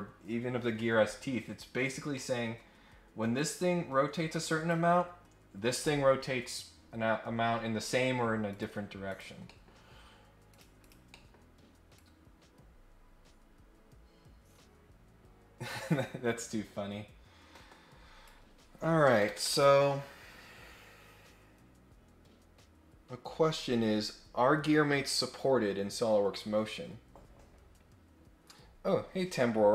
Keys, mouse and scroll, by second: 1.9 scroll down 1, 2.1 middle click, 2.6 scroll up 1, 3.3-4.7 drag, 8.4 click, 9.1 click, 9.4 middle click, 10.4 click, 10.8 click, 11.1 middle click, 11.9-18.3 drag.